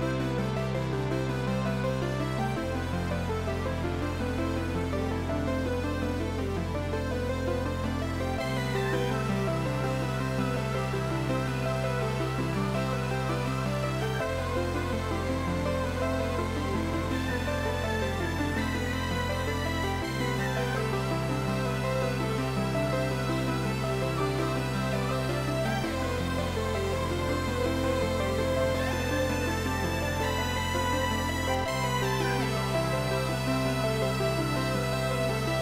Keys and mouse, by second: 3.2 Delete, 4.2 click, 4.6 Delete, 5.4 click, 8.9 click, 11.7 shift+click, 13.4 click, 13.7 ctrl+shift+x, 15.0 click, 15.6 shift+click, 17.1 click, 18.9 h, 20.6 right click, 21.3 click, 25.0 right click, 25.3 click, 29.2 Right, 29.5 Left, 30.3 space, 32.2 Right, 32.4 Up, 33.1 Right, 33.3 Left, 35.0 click.